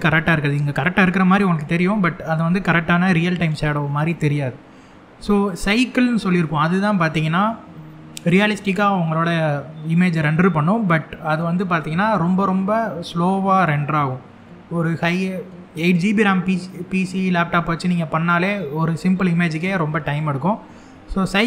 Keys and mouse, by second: 5.2-21.2 drag.